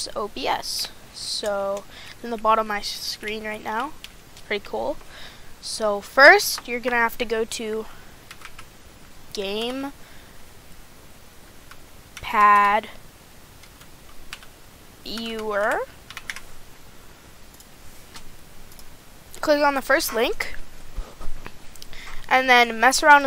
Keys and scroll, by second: 1.2 a, 4.2 a.